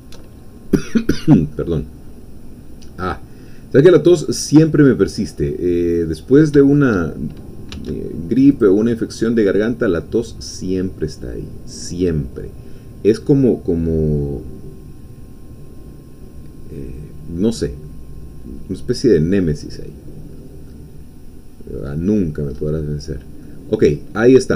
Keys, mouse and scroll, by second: 0.3-1.5 alt+shift+middle drag, 1.5-3.8 drag, 3.8-5.0 middle drag, 5.1 scroll up 1, 5.5 middle click, 6.3 scroll down 1, 6.7 shift+middle click, 7.7 x, 8.5 click, 9.2 scroll down 1, 9.6-19.4 middle drag, 19.6-20.2 scroll up 1, 20.2-20.6 scroll down 1, 20.8-22.5 middle drag, 22.5-23.1 scroll up 1, 23.1 scroll down 1, 23.4-24.5 middle drag.